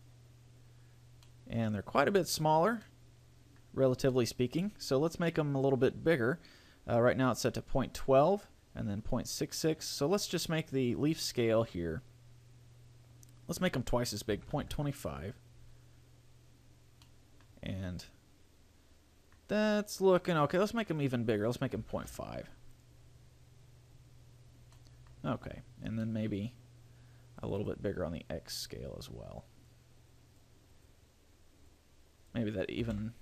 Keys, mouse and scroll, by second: 0.6 click, 1.5 middle click, 2.3-3.1 scroll up 4, 3.1 middle click, 3.9-4.5 scroll down 3, 4.3 middle click, 5.1-5.7 scroll up 2, 10.7 click, 12.5 click, 17.2 middle click, 17.7-18.2 scroll down 4, 18.2 middle click, 19.7 scroll up 3, 21.1 click, 24.6-25.1 scroll down 2, 24.9 middle click, 25.5 scroll up 5, 26.3 middle click, 27.7 click, 30.9 click.